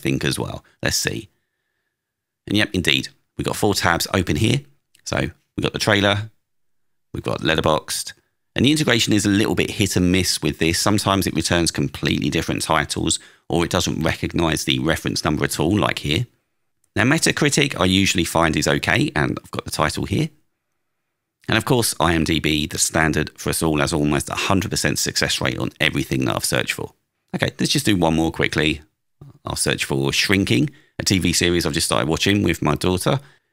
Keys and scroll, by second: 1.0 Return, 6.7 super+w, 26.0 super+q, 27.2 alt+space, 29.3 space, 30.2 BackSpace, 33.1 Return.